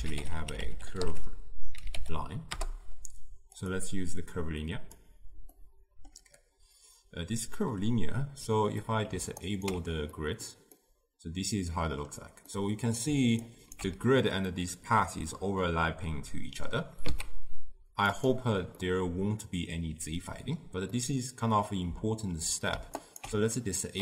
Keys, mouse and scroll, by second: 5.0-5.7 drag, 5.7-9.8 middle drag, 9.8 ctrl+alt+right click, 10.9-13.9 middle drag, 13.9 ctrl+alt+Right, 14.7-23.3 middle drag, 23.3 ctrl+alt+right click.